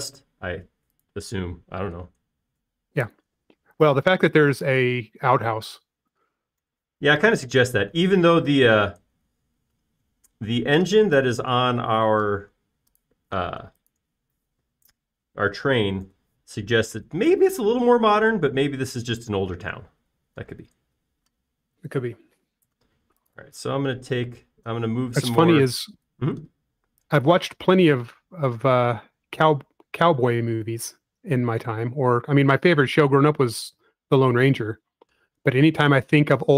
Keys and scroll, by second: 0.9 m, 4.5 space, 7.6 s, 12.8 space, 17.0 s, 20.7 space, 25.1 shift+p, 26.4-27.2 typing, 28.6 shift+s.